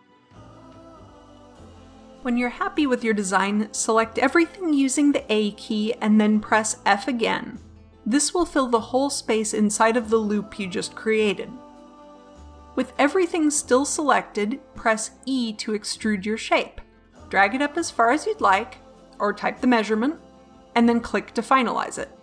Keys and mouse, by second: 0.2 g, 4.0 a, 4.3 a, 6.1 f, 13.2 middle click, 14.9 e, 19.7-21.8 middle drag.